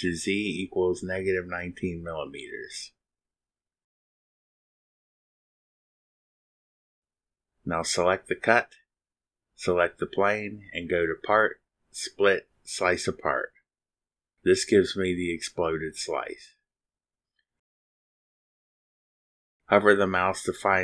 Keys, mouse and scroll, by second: 1.6 click, 2.3 click, 2.6 middle click, 3.5 click, 4.2-5.0 typing, 6.5 click, 9.6 click, 10.2 ctrl+click, 11.1 click, 15.2 click, 18.2 click.